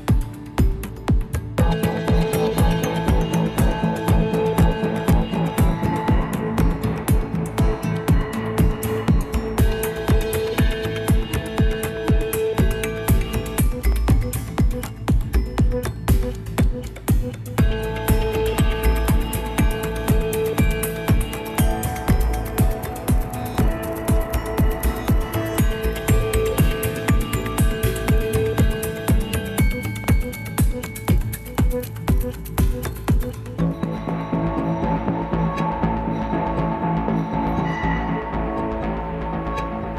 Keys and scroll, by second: 4.9 Left, 5.0 Left, 5.1 Left, 5.3 Left, 5.6 Left, 6.7 ctrl++, 6.9 ctrl++, 7.0 ctrl++, 8.1 Right, 8.3 Right, 8.5 Right, 16.0 Left, 16.1 Left, 21.3 ctrl+-, 21.4 ctrl+-, 21.5 ctrl+-, 22.1 ctrl+-, 23.9 ctrl+s, 32.5 Left, 32.8 Left, 34.7-35.7 Right, 37.1-37.7 Up.